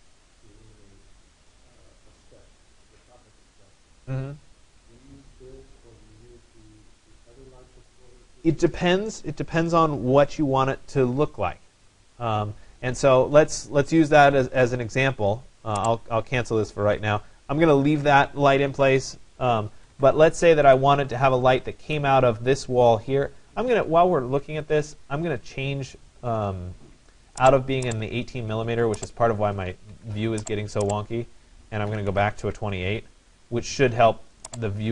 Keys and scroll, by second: 19.4 Escape, 24.1 Escape, 29.5 Escape, 31.7-32.6 typing.